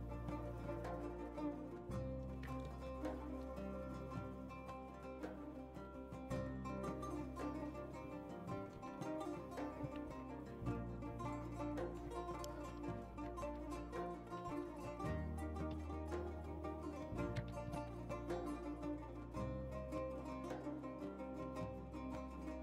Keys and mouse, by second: 0.0-0.9 drag, 1.5 drag, 2.1 click, 2.3 Tab, 2.6 s, 2.7 drag, 3.3-3.7 drag, 4.8 click, 5.7 g, 8.0 s, 10.0 Tab, 11.1 s, 11.2 click, 11.4 click, 12.1 click, 12.6 click, 12.9 click, 13.1 z, 13.4 z, 14.2 g, 15.7 z, 16.5 s, 17.3 z, 17.7 g, 19.6 s, 19.9 shift+click, 20.2 g, 21.1 s.